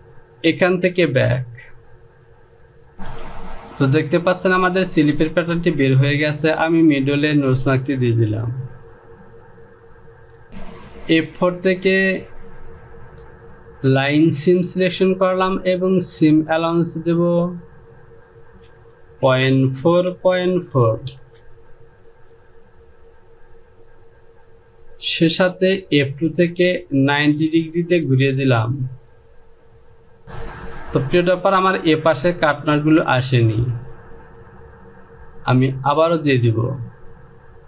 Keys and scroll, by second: 10.5 Home, 19.3 Down, 19.8 KP_Decimal, 20.3 KP_4, 20.6 Down, 20.8 KP_Decimal, 21.3 KP_4, 21.6 Down.